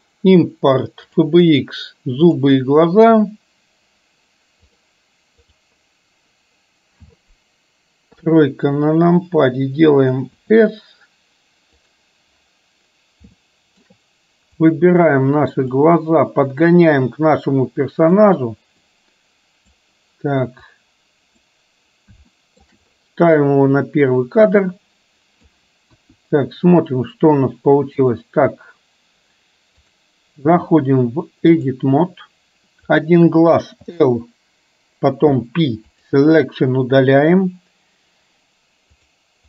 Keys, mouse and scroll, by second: 8.2 KP_3, 10.3 s, 13.5 shift+middle click, 14.7 click, 15.8-18.3 drag, 19.0 click, 20.7 click, 22.3 shift+middle click, 24.6-25.5 drag, 26.0 KP_1, 29.8-31.8 drag, 33.0 click, 39.2 click.